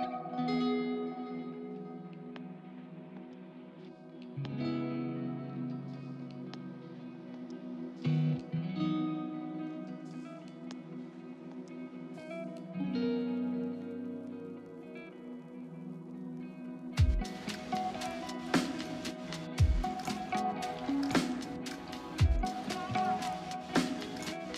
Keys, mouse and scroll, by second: 8.7 double click, 14.5 right click.